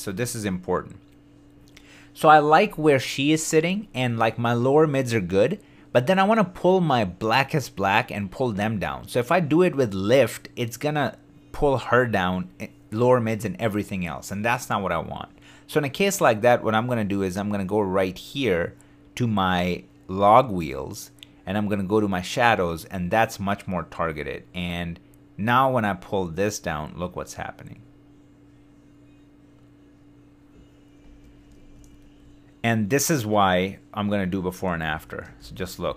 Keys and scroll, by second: 31.7 super+d, 34.8 super+z.